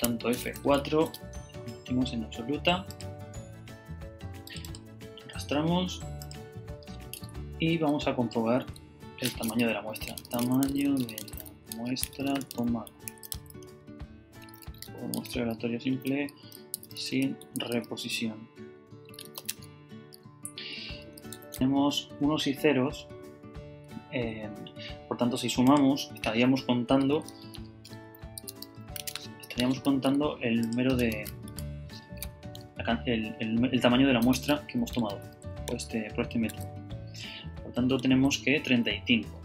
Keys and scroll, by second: 1.1 Return, 7.5 Right, 8.3 Down, 8.6 Up, 8.9 Left, 9.8-19.2 typing, 19.5 Tab, 21.1-21.9 typing, 27.5-29.1 typing, 31.6 shift+super+Down, 34.2 Return, 35.0 super+Return, 35.8 super+Up, 37.0 Up, 38.0 Down.